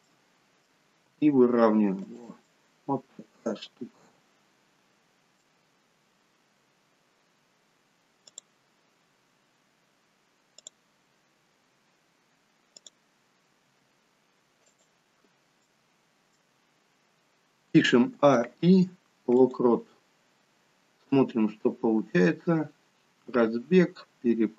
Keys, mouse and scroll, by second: 0.0 middle click, 1.1 r, 2.4 middle click, 8.2 click, 10.7 click, 13.7 r, 15.2-15.6 scroll down 2, 15.6 middle click, 17.8 a, 18.3 i, 21.1 click.